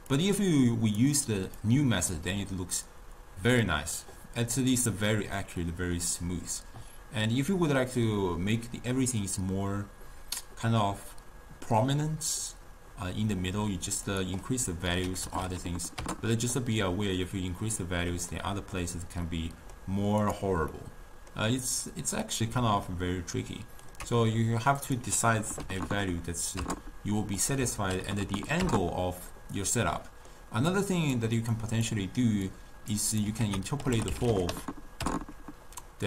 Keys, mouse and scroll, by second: 0.2 drag, 1.7 click, 14.2-15.5 drag, 15.5 0, 15.7 0, 17.2-20.3 middle drag, 20.3 click, 20.8-22.3 middle drag, 22.3 click, 23.0-24.9 ctrl+middle drag, 24.9-25.9 drag, 25.9 0, 27.5 click, 28.2 0, 28.3 0, 30.1-30.8 middle drag, 30.8 click, 31.7 click, 32.5 click, 33.2 click, 33.5 ctrl+a.